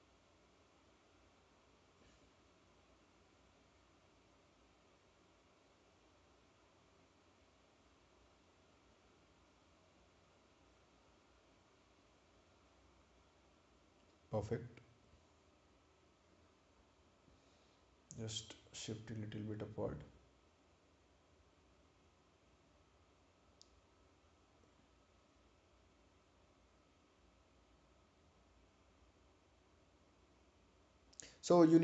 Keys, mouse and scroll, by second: 2.6 click, 5.6 click, 13.8 click, 16.3 click, 18.1 right click, 19.0 click, 28.7 click.